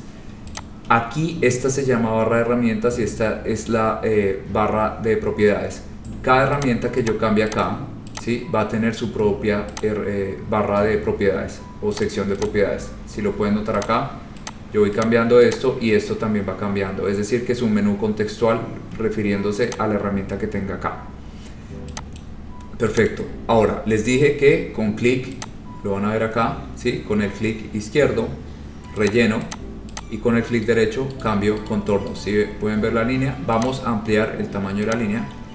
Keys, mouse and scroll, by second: 0.7 click, 6.7 click, 7.2 click, 7.7 click, 8.3 click, 9.9 click, 12.2 click, 12.6 click, 14.0 click, 14.7 click, 15.2 click, 15.7 click, 19.9 click, 22.4 click, 23.2 click, 25.6 click, 29.2 click, 29.7 click, 30.2 click, 30.9 right click, 31.4 right click, 31.8 right click, 32.3 right click, 33.8 click, 35.1 click.